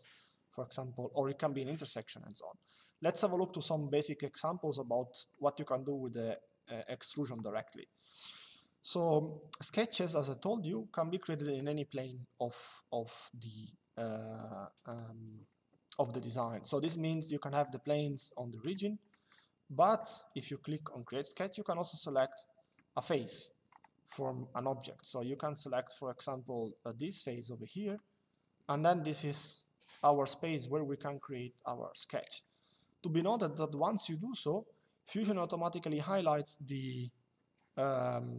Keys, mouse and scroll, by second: 6.0 middle click, 14.6 click, 16.9 middle click, 17.9 shift+middle click, 21.9 shift+middle click, 27.6 click, 31.6 middle click.